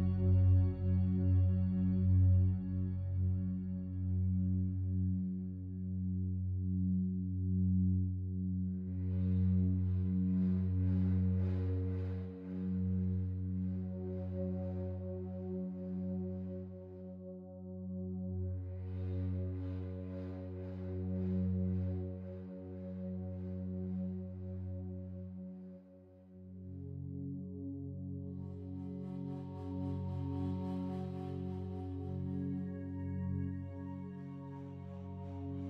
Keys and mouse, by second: 0.0 click, 1.4 click, 3.5 click, 4.5 click, 6.0 Escape, 6.9-9.6 drag, 12.3 i, 13.1-14.0 drag, 14.2 click, 15.6 Left, 15.8 Left, 16.8 i, 17.1-17.9 drag, 18.2 Right, 18.4 Right, 18.5 Right, 18.7 Right, 19.6 i, 20.0 click, 21.3 click, 22.9 s, 24.0 click, 24.7 i, 25.1-26.0 drag, 26.1-27.1 drag, 27.1 s, 27.5 0, 27.7 Return, 28.1 i, 28.4-30.2 drag, 29.3-29.7 typing, 31.0-32.8 typing, 31.4 click, 34.3 click.